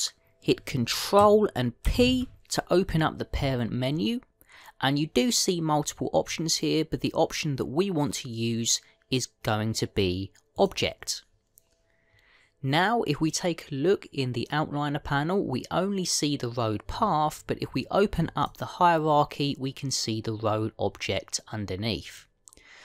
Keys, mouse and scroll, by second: 2.7 ctrl+p, 19.3 click.